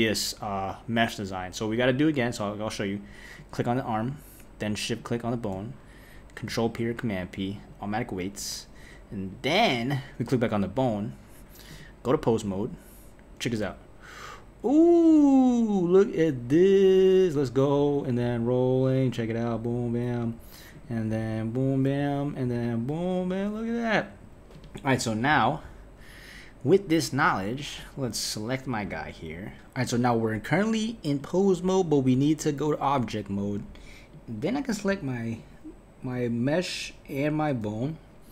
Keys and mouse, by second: 2.1 click, 3.4 click, 4.9 shift+click, 6.6 p, 9.3 click, 11.7-13.6 drag, 13.6 g, 18.2 r, 20.7 click, 21.1 g, 22.5 r, 24.5 click, 27.8 click, 31.2-33.5 drag, 34.1 drag, 34.7 click, 35.4 click.